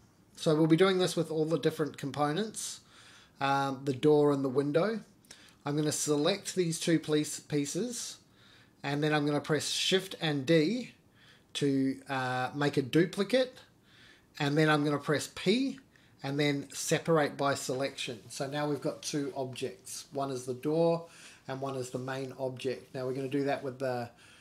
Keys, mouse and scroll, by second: 1.1 ctrl+r, 2.9 ctrl+r, 6.4 scroll up 1, 6.8 shift+middle click, 7.6-9.0 middle drag, 10.6 3, 11.1 click, 11.6 shift+click, 11.9 scroll down 1, 12.1 middle click, 12.9 middle click, 14.2 ctrl+z, 14.2 middle click, 14.3 middle click, 14.9 shift+d, 16.4 p, 18.1 Tab, 18.2 click, 18.7 middle click, 19.2 g, 24.1 click.